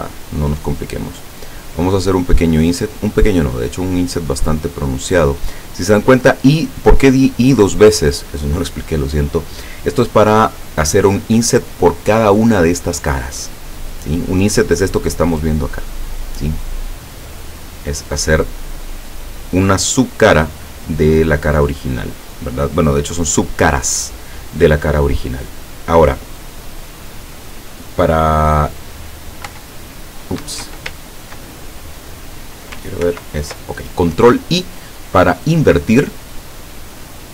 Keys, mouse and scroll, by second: 5.9 click, 15.2-15.6 scroll up 2, 29.5 i, 30.4 Escape, 33.1 ctrl+i, 36.6-37.1 scroll down 2.